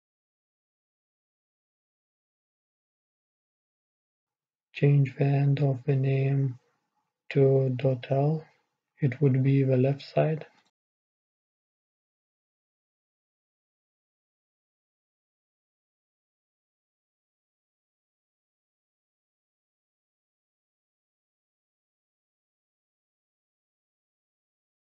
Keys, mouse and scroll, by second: 0.3-5.1 drag, 0.3-5.1 middle drag, 5.1-8.9 right drag, 9.4-11.4 drag, 12.5-15.3 drag, 20.5-23.2 right drag, 21.2-23.2 drag, 24.4 right click.